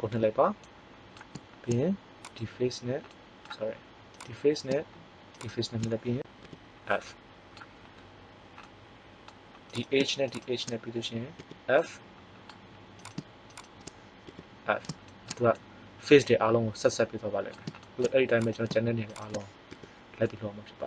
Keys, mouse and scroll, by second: 0.1 f, 2.2 right click, 6.5 f, 9.7 right click, 11.4 f, 14.3 f, 18.3-19.6 right drag, 19.6 f, 20.2 middle click.